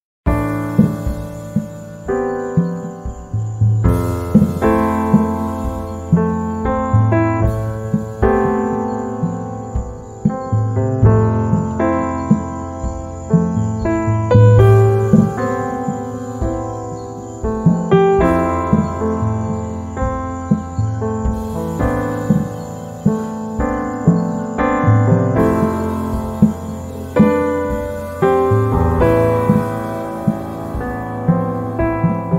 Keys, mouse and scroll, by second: 1.2 z, 1.6 click, 2.2 space, 3.2 click, 5.0 h, 5.1 click, 5.4 space, 5.9-8.8 drag, 8.8 right click, 9.7-13.6 drag, 13.6 right click, 15.0 z, 15.2 right click, 15.5 space, 16.6 h, 16.8 click, 17.5 space, 21.1 click, 24.2 shift+click, 28.8 click, 29.8 ctrl+z, 30.8 shift+click.